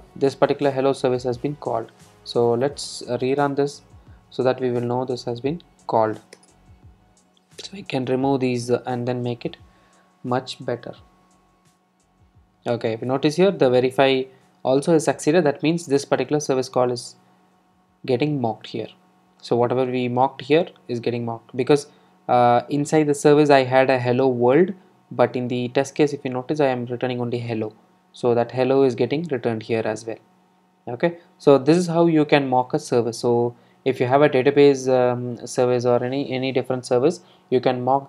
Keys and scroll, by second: 2.1 super+r, 6.4 alt+Return.